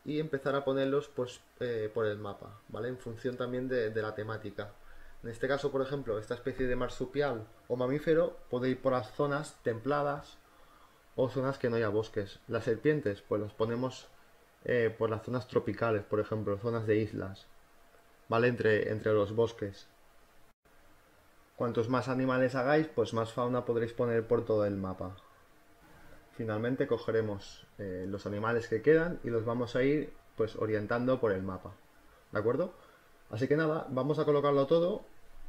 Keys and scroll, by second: 2.6 Return, 13.2 ctrl+t, 16.5 Return, 18.6 z, 21.9 space, 24.5 ctrl+t, 25.2 space, 27.7 v, 30.9 space.